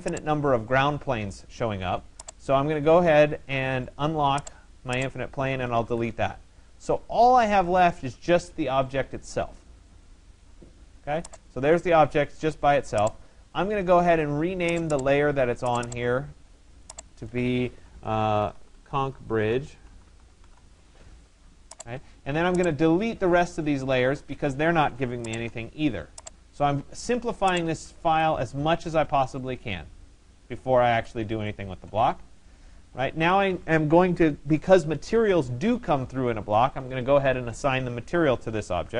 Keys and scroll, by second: 5.5 Delete.